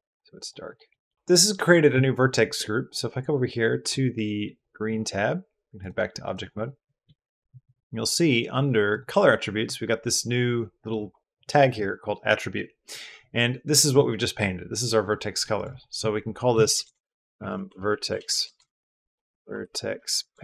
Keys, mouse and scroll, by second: 0.2 click, 0.6 click, 0.9 click, 5.6 click, 8.7 click, 15.6-20.4 drag, 16.5 BackSpace, 16.6 BackSpace, 18.1 BackSpace, 18.2 BackSpace.